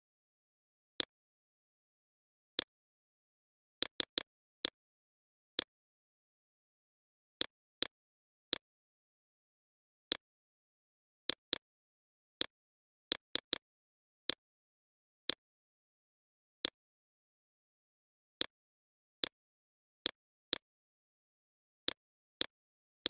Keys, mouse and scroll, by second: 4.1 click, 8.3 click, 9.9-18.8 alt+drag, 18.8 BackSpace, 19.7-23.0 drag.